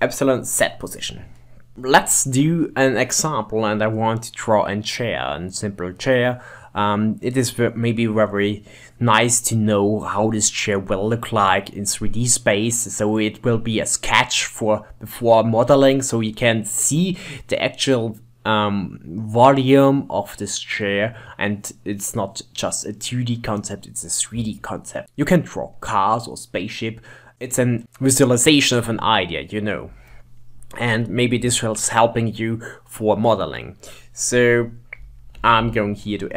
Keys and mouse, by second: 35.2 shift+middle click, 35.7 Tab.